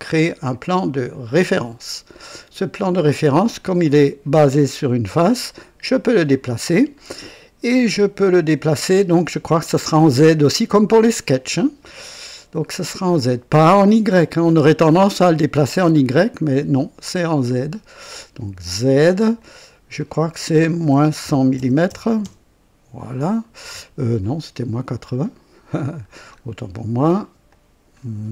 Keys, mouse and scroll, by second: 1.3 click, 5.6-6.4 drag, 14.0 click, 16.2-17.5 drag, 18.8 click, 19.4 click, 20.8 KP_Subtract, 21.2 KP_1, 21.2 KP_1, 21.5 KP_0, 21.8 KP_0, 22.2 KP_Enter, 23.6-24.3 drag, 25.0 click, 26.0-26.4 scroll down 1, 27.4 click.